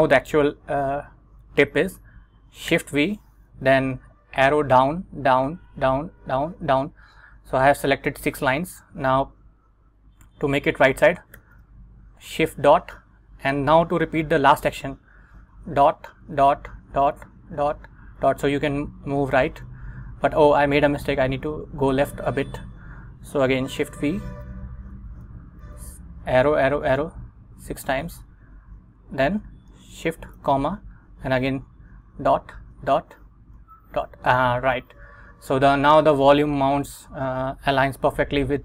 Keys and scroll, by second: 2.8 shift+v, 4.4 Down, 5.2 Down, 5.8 Down, 11.5 shift+., 15.6 ., 16.9 ., 23.9 shift+v, 25.0 Down, 25.7 Down, 26.6 Down, 30.5 shift+', 32.1 ., 32.8 ., 33.7 ., 38.2 Escape.